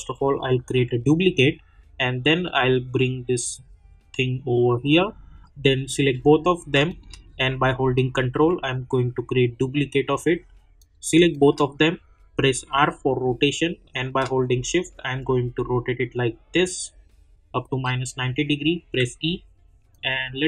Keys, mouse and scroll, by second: 0.1-5.9 ctrl+drag, 6.9 shift+click, 7.9-10.8 ctrl+drag, 11.3 shift+click, 12.5 r, 14.3-17.8 shift+drag, 18.8 e, 20.2-20.4 drag.